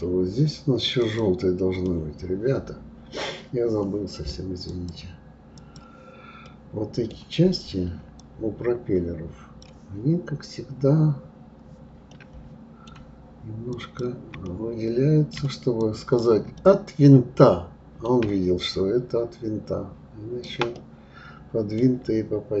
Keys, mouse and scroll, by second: 1.0 click, 1.9-4.7 middle drag, 4.7-6.4 drag, 6.4-8.2 middle drag, 8.2 click, 12.1-13.7 middle drag, 13.7 shift+click, 14.4-15.8 middle drag, 15.8 shift+click, 16.6-18.7 middle drag, 18.7-20.7 shift+drag, 20.7-22.6 middle drag.